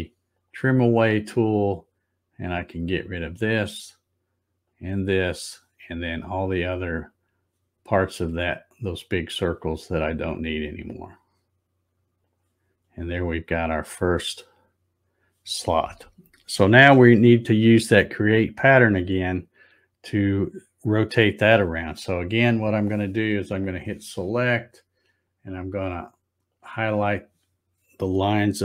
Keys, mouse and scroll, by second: 0.3 click, 2.8 click, 4.6 click, 7.0 click, 8.8 click, 10.8 click, 12.2 click, 12.8-13.8 scroll up 12, 14.5-15.2 scroll down 2, 23.6 click, 24.4-24.8 scroll up 2, 26.5 click.